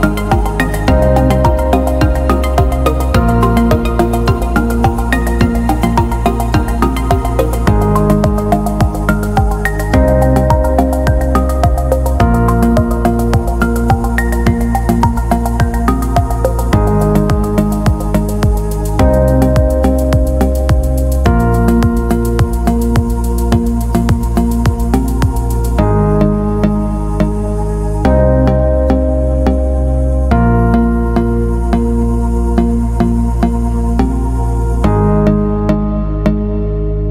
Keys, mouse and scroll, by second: 1.4-2.3 scroll down 4, 4.9 click, 9.6-11.3 drag, 13.1 click, 14.8 click, 16.4-18.1 scroll down 8, 22.2-22.7 scroll down 2, 28.0-28.3 scroll down 2, 28.8-29.6 scroll up 2, 30.8 click.